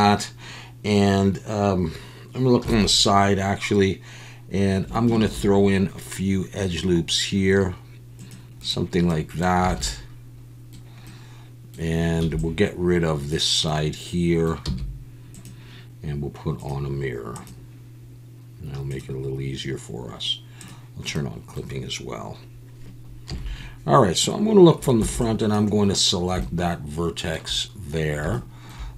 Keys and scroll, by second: 2.6 KP_3, 5.2 ctrl+r, 9.7 alt+a, 12.2 b, 14.6 x, 23.3 KP_1, 25.0 b.